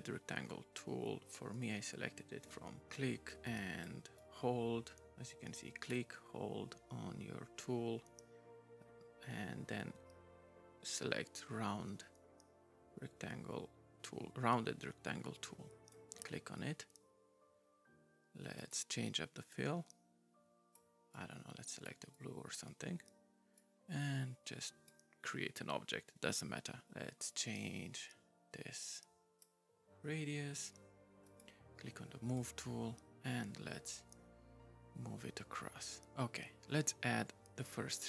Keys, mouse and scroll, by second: 18.6 right click, 19.5 right click, 21.1 right click, 22.1 right click, 23.6 right click, 26.8 right click, 27.3 right click, 31.2 right click, 32.3 right click.